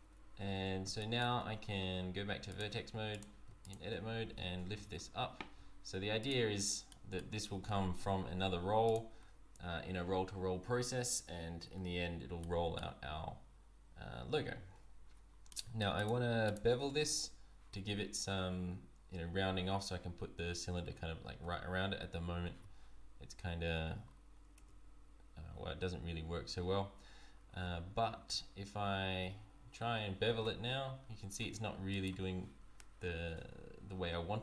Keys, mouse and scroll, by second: 0.3 scroll down 1, 0.6 Tab, 1.0 middle click, 1.3 Tab, 2.5 click, 3.3 click, 3.6 shift+click, 4.3 g, 6.5-6.9 scroll down 3, 6.9 middle click, 7.6 g, 9.2-9.9 scroll up 3, 11.7-12.2 scroll down 1, 12.4 middle click, 15.5 middle click, 15.5 z, 16.0 click, 16.4 shift+click, 24.1 scroll up 3, 24.7 Tab, 26.6 Tab, 27.7 z, 28.8 z, 30.3 ctrl+b.